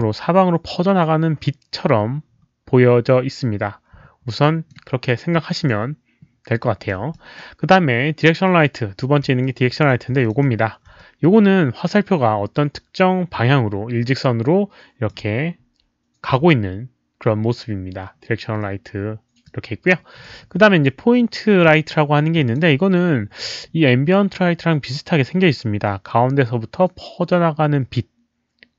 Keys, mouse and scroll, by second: 4.4 alt+middle click, 5.2 alt+scroll down 1, 5.6-6.9 alt+drag, 7.1 drag, 9.4-9.8 alt+drag, 10.2 alt+click, 11.0-15.0 alt+drag, 19.4-20.2 alt+drag, 20.5 drag, 21.8 alt+middle click, 22.3 alt+click.